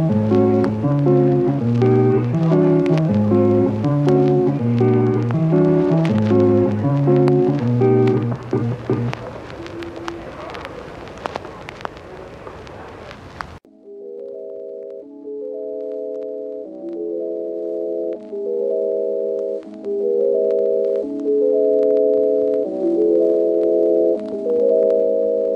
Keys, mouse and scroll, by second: 0.5 ctrl+z, 0.7 click, 1.4 click, 4.5 click, 7.5 ctrl+z, 10.2 ctrl+z, 10.3 click, 10.8 click, 12.0 click, 12.4 click, 13.7 click, 17.4 Return, 18.0 Return, 18.7 Return, 19.5 Return, 20.6 Return, 21.9 Return, 25.4 click.